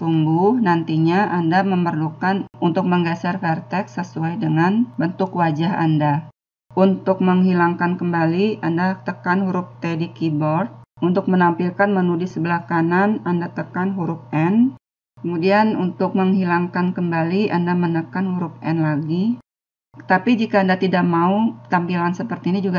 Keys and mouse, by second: 7.7-9.1 drag, 9.1 t, 11.1 n, 18.9 n.